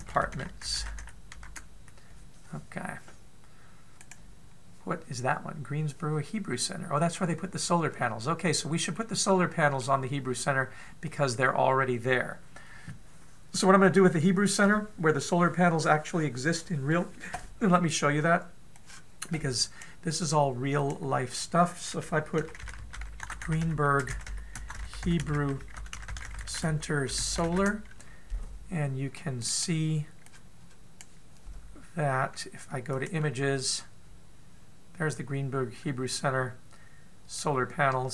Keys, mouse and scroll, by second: 4.8 right click, 8.7-9.8 scroll down 1, 9.8 middle click, 9.8 scroll down 2, 11.1-11.5 scroll up 2, 11.5-12.0 scroll down 2.